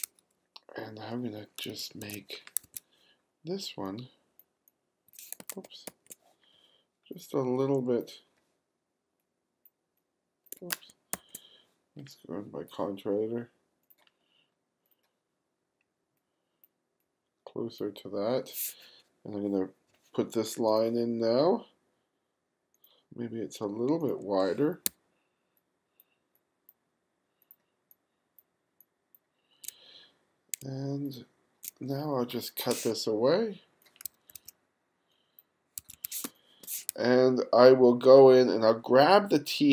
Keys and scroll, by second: 1.7 2, 2.7 1, 5.5 super+z, 5.9 super+z, 10.7 super+z, 24.9 q, 30.6 q, 34.1 2, 35.8 1, 36.3 space.